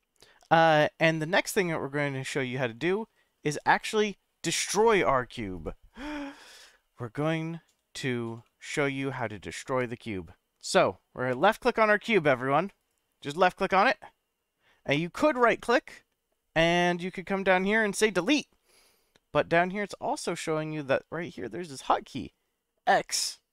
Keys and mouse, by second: 1.1-1.5 shift+middle drag, 7.2-8.2 middle drag, 8.4-8.9 shift+middle drag, 15.3-23.5 right drag.